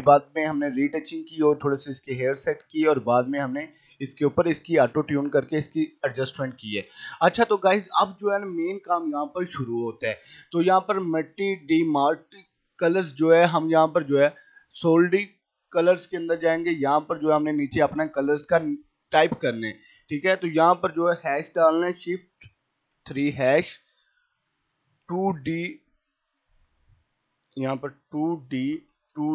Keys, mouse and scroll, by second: 3.1 click, 6.0 right click, 6.4 click, 13.6 click, 17.7-22.9 drag, 22.9 shift+3, 24.6-25.8 typing, 27.3 click, 28.3-29.3 typing.